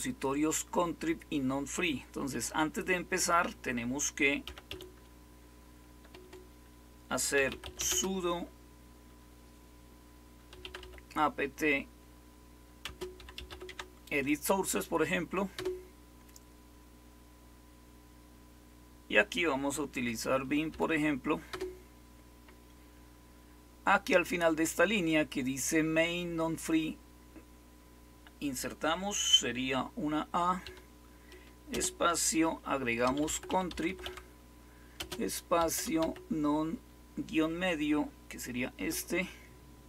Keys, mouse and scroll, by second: 4.1-5.9 typing, 7.1-8.2 typing, 10.2-11.3 typing, 12.8-13.9 typing, 15.5 Return, 15.5 typing, 20.6-23.2 typing, 30.6 typing, 31.6 typing, 32.7-36.4 typing, 39.6-39.8 typing.